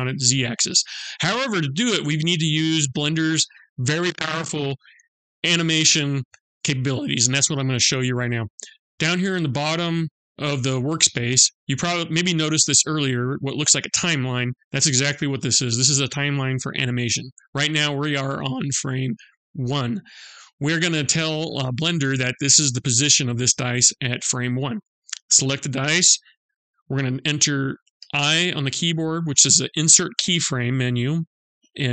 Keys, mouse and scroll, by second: 24.2 click, 27.6 i.